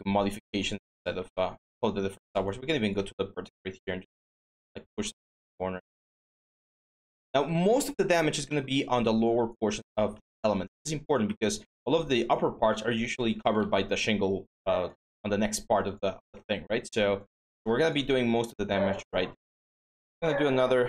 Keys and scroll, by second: 5.6 w, 9.9 ctrl+d, 13.4 ctrl+z, 20.0 ctrl+d.